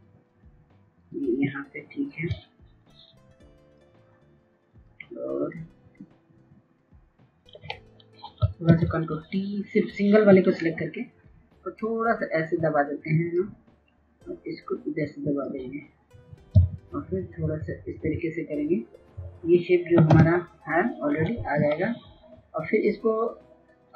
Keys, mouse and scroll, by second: 8.4 ctrl+t, 10.9-15.5 drag, 16.3 Left, 16.4 Left, 16.7 Left, 16.8 Left, 17.0 Left, 18.7-19.4 typing, 19.8 Return, 22.3 click.